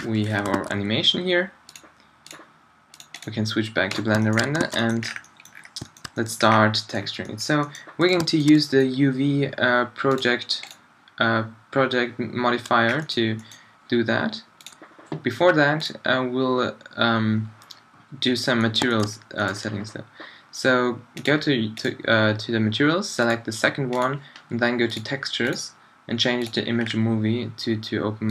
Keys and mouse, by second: 0.3-2.7 middle drag, 0.6 alt+a, 2.7-3.9 drag, 4.6 alt+a, 8.9-12.6 drag, 12.6-18.8 middle drag, 18.9 middle drag, 19.4 middle click.